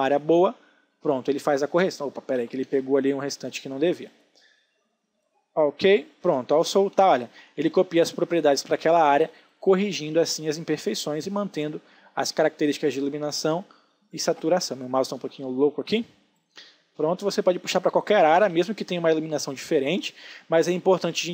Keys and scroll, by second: 1.9 ctrl+z, 2.7 space, 6.6 ctrl+d, 6.9 space, 14.5 space, 18.8 ctrl+d, 19.7 ctrl+space.